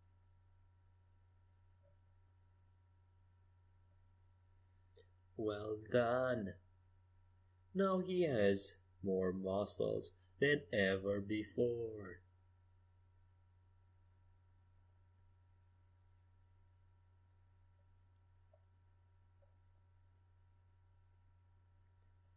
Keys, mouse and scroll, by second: 0.4-1.8 middle drag, 6.3 KP_5, 6.4 KP_1, 6.5 KP_3, 6.8 KP_5, 9.8 z, 10.3 Tab, 15.4 middle click, 17.3 KP_5, 17.4 KP_1, 17.6 KP_3, 17.8 KP_5, 19.1 z, 19.8 click.